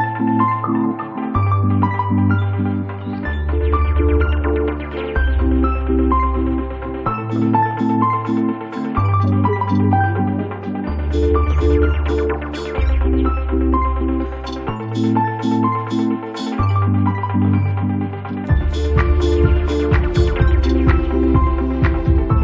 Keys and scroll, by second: 3.1 space.